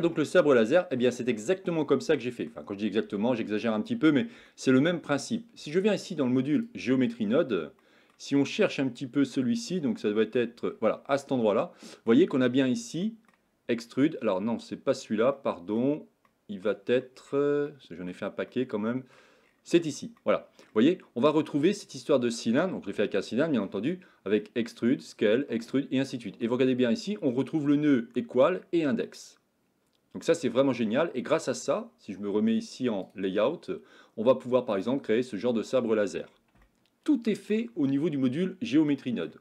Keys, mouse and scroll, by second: 0.1-1.0 shift+middle drag, 1.4-2.5 middle drag, 3.1-3.6 shift+middle drag, 4.4-5.1 shift+middle drag, 33.0 click, 36.6-37.6 shift+middle drag, 37.9 middle click, 38.1-39.3 middle drag.